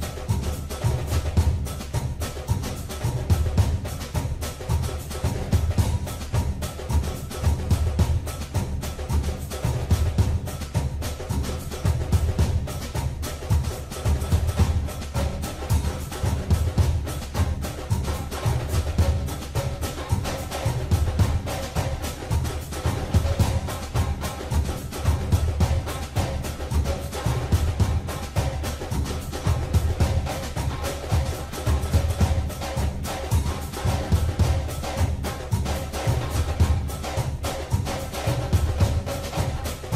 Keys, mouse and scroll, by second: 4.0 click, 10.6 click, 15.2 click, 22.1-23.9 scroll up 4, 23.9 click, 26.1-26.7 scroll up 1, 27.5 click, 29.5 Tab, 33.9 ctrl+r.